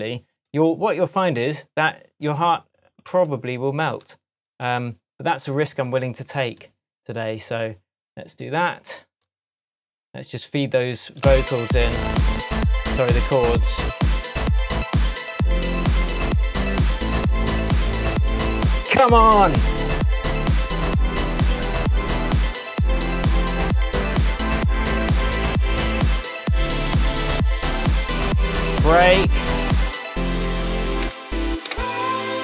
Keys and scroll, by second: 31.1 BackSpace.